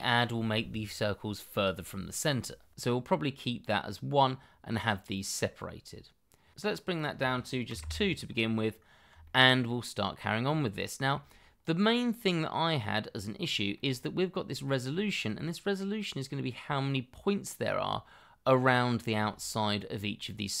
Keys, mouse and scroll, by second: 6.5 ctrl+z, 7.7 2, 7.8 Return, 8.7-9.1 scroll down 1, 9.2 shift+middle click, 10.7 shift+middle click, 13.5 shift+middle click, 13.9-14.4 scroll up 1, 14.6 shift+middle click, 15.1-16.7 scroll up 1, 18.6-19.0 scroll up 1, 19.6-20.6 scroll down 1.